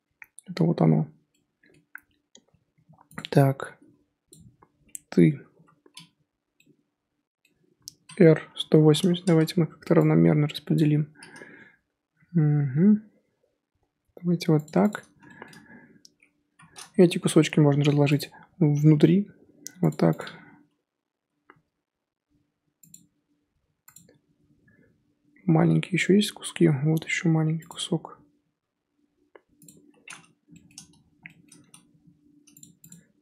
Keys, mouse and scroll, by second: 2.7 g, 4.3 click, 5.5 l, 6.5-7.9 middle drag, 7.9 r, 10.7 click, 12.1 g, 14.9 click, 16.5 l, 17.6 g, 20.2 Left, 21.2 l, 21.5 g, 23.1 l, 23.9 Left, 26.7 l, 27.1 g, 32.9 Left.